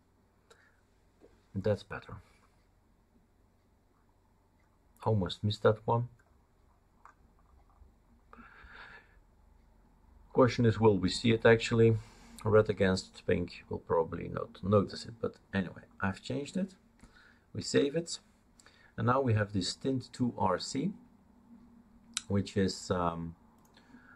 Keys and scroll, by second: 17.6 ctrl+s.